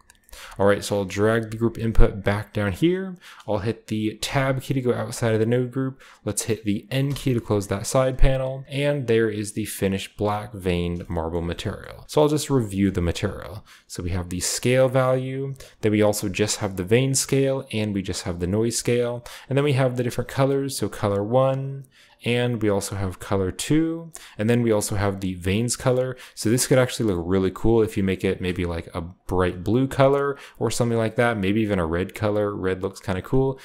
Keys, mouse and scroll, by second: 0.1-1.0 middle drag, 0.7 click, 1.3 g, 2.6-4.7 drag, 3.9-4.6 typing, 4.7-6.9 scroll up 1, 5.4 middle click, 5.7-7.0 typing, 7.6 click, 10.0 click, 10.7-11.3 scroll down 1, 10.9-12.0 shift+drag, 11.3-12.3 shift+scroll up 1, 13.6-14.8 drag, 15.7-16.8 drag, 17.3 click, 19.1 click, 20.0 click, 22.0 click, 22.5-23.6 drag, 23.8 click, 23.8 right click, 24.5 click, 25.7 drag, 26.4-28.3 drag, 28.5-33.1 drag, 28.5-29.1 scroll up 1, 29.6-30.2 scroll up 1, 33.4-33.6 scroll down 2, 33.4-33.6 drag.